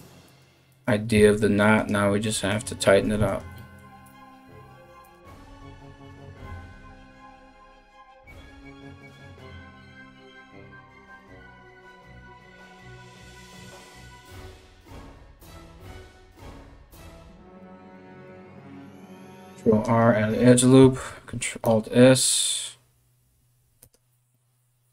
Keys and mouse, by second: 0.3 right click, 0.7 g, 2.1 right click, 2.2 middle click, 2.8 right click, 2.9-5.2 middle drag, 3.6 g, 5.2 right click, 5.4 middle click, 5.4 g, 6.0 right click, 6.1-11.4 middle drag, 6.7-11.6 typing, 7.3 click, 8.2 click, 9.1 click, 10.4 right click, 11.4 right click, 11.6-12.7 middle drag, 12.7 right click, 12.8-13.9 middle drag, 12.8 g, 13.9 right click, 14.0-24.9 middle drag, 14.0 g, 15.5 click, 15.6 g, 16.5 click, 16.6 g, 17.5 click, 17.6 g, 19.0 ctrl+r, 20.5 alt+s.